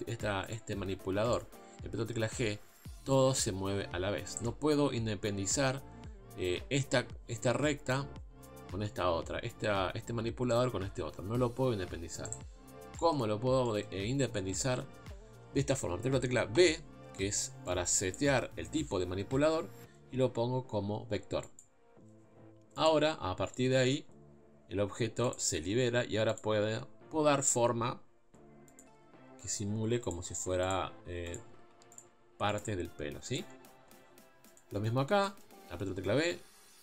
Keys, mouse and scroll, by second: 0.5 click, 1.3 click, 2.0 g, 11.7 g, 12.9-21.6 shift+middle drag, 22.8 click, 23.7 g, 26.4 click, 26.5 g, 30.1 click, 30.2 g, 31.3 click, 31.5 g, 32.6 click, 32.6 g, 34.6 click, 35.2-36.8 shift+middle drag.